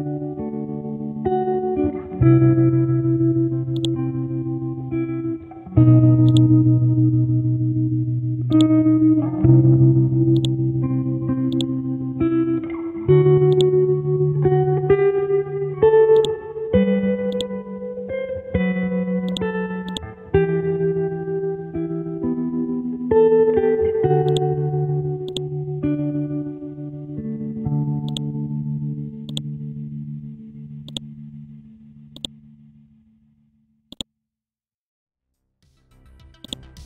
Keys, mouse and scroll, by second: 0.8-1.4 scroll up 1, 1.4-3.7 scroll down 1, 3.7-5.1 drag, 5.2-6.2 scroll up 1, 6.3-8.2 drag, 9.2-10.4 scroll up 1, 10.4 click, 12.6-13.5 scroll down 1, 13.5 click, 15.0-16.1 scroll up 1, 16.1-18.3 drag, 19.3 shift+click, 19.9 click, 20.2-20.9 scroll down 1, 20.9-21.4 scroll up 1, 22.6-23.5 scroll down 1, 23.5-24.3 scroll up 1, 24.4-26.9 drag, 26.9-27.5 scroll up 1, 28.1-30.5 drag, 30.9 shift+click, 32.2 click, 33.1-33.9 scroll down 1, 33.9 click, 35.2-36.4 scroll up 1, 36.4-36.8 drag.